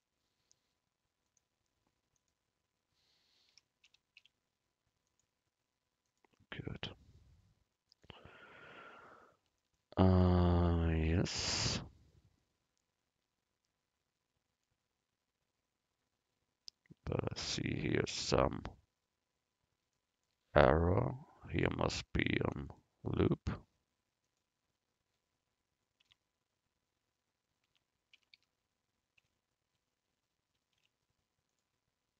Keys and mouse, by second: 1.3-4.2 drag, 6.1-9.6 drag, 6.9 Tab, 17.1 Tab, 22.3 ctrl+r, 26.1 Tab, 27.7 Tab, 28.2 a, 28.4 a, 29.2 z, 30.8 u.